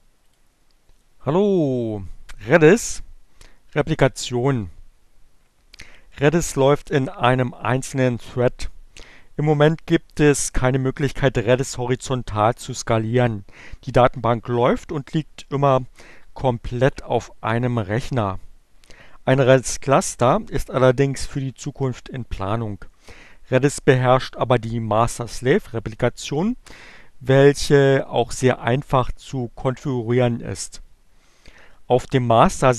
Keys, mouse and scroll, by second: 0.1 click.